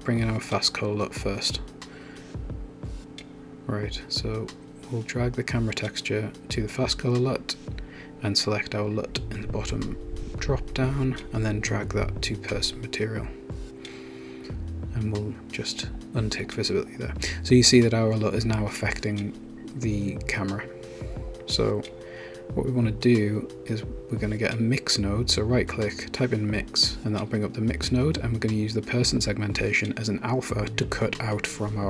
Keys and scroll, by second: 24.0-25.6 typing, 26.0 Return.